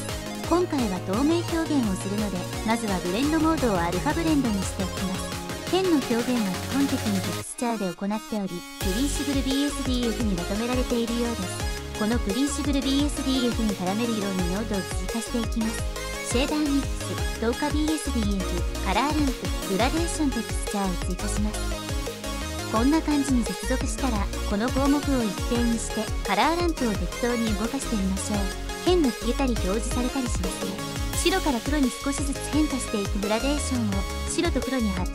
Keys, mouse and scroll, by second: 0.0 click, 4.8-5.5 drag, 8.8 click, 11.1-11.9 drag, 12.8 middle click, 13.5 click, 13.7 shift+a, 14.6 shift+a, 16.0 shift+a, 17.6 shift+a, 18.7 shift+a, 20.4 click, 21.1-21.5 drag, 22.0 ctrl+z, 22.0 click, 24.9-25.6 drag, 26.4-32.7 drag.